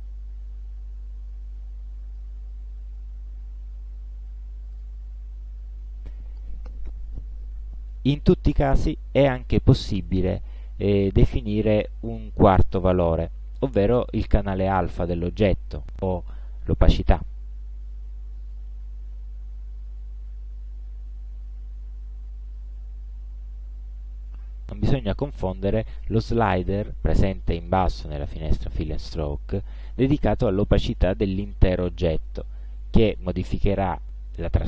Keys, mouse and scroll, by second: 0.7-2.4 drag, 4.8 click, 17.9-22.8 drag, 24.5 ctrl+scroll down 2, 24.9 ctrl+scroll up 2, 30.0 ctrl+scroll up 2, 30.7 ctrl+click.